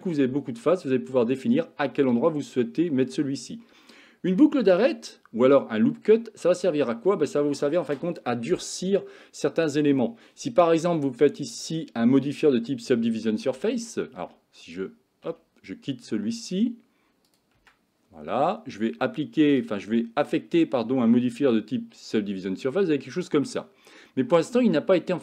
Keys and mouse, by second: 17.6 Tab, 19.6-22.2 drag, 22.9-23.5 middle drag.